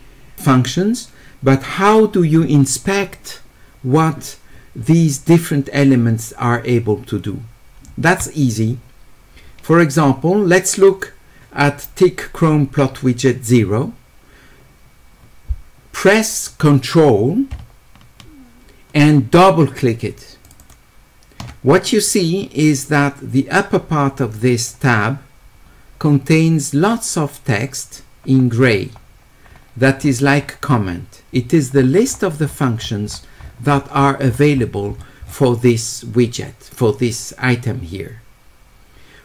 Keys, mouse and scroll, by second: 10.8 click, 20.4 ctrl+click, 20.6 ctrl+click, 22.8-24.7 drag, 25.4-29.8 middle drag, 25.4-29.7 scroll up 2, 29.7 scroll up 1, 30.0 middle click, 30.4-32.2 middle drag, 32.5 middle click, 33.1 middle click, 33.7 middle click, 34.0 middle click, 34.5-34.9 scroll up 1, 34.9-35.7 scroll down 2.